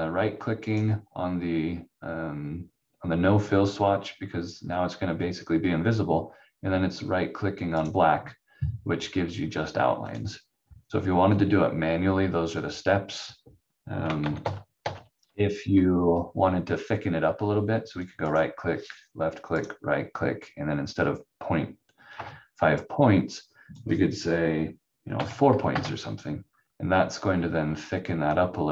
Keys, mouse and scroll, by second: 0.7 right click, 7.7 right click, 10.0 click, 14.2 ctrl+z, 14.4 ctrl+z, 17.9 click, 18.3 right click, 23.3 click, 25.1 4, 25.7 Return, 27.0 scroll up 1, 28.0 scroll down 1.